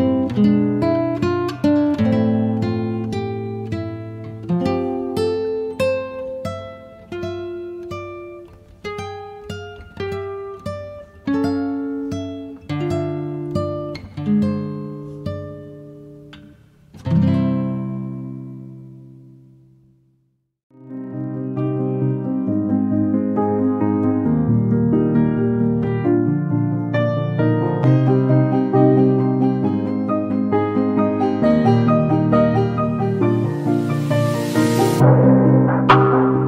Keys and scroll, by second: 6.1 r, 8.7 space, 12.5 m, 15.6 space, 17.7 b, 24.4 space, 28.8 b, 32.7 space.